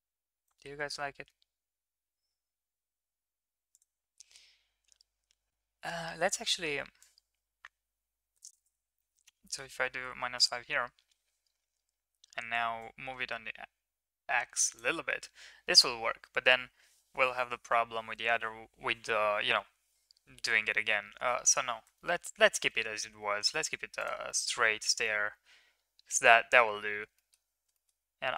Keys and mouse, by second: 3.7 click, 3.7 right click, 6.9-8.4 drag, 6.9-8.4 right drag, 8.7-10.3 drag, 8.7-10.3 right drag, 12.8-14.8 drag, 12.8-14.8 right drag, 22.0 ctrl+z, 22.3 ctrl+z, 22.5 ctrl+z, 22.7 ctrl+z, 23.0 ctrl+z, 24.0 middle click, 24.3 middle drag, 25.0-26.6 middle drag, 26.9 ctrl+s, 27.1 middle click, 27.7 shift+middle drag.